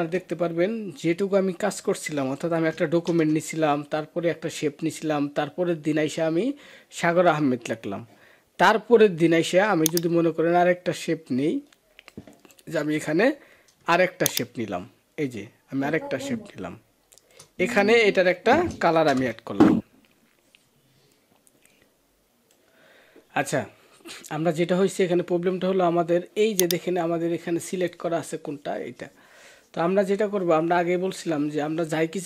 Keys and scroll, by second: 2.9 ctrl+-, 18.9 ctrl+BackSpace.